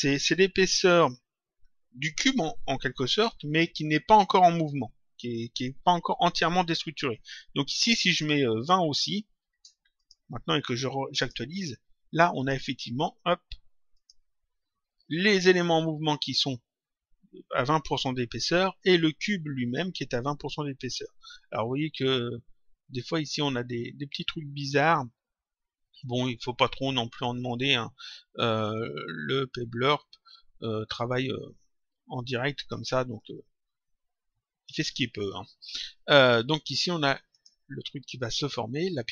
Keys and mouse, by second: 8.6 click, 9.9 click, 11.1 click, 12.3 click, 13.9 click, 21.1 click, 26.1 click, 33.1 click, 35.3 click, 37.3 click.